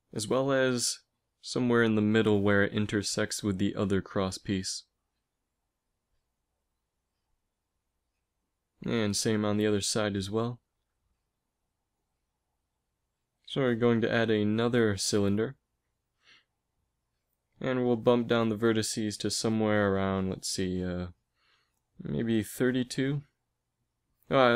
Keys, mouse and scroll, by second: 12.2-16.1 drag, 13.1 shift+a, 17.6 F6.